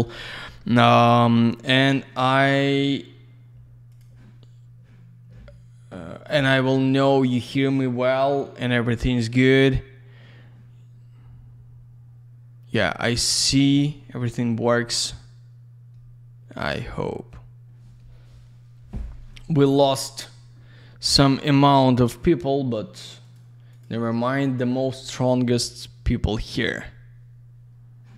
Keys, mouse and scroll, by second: 3.8 click, 6.9 click, 7.1 click, 23.1 click, 23.2 click, 23.6 click, 23.7 double click.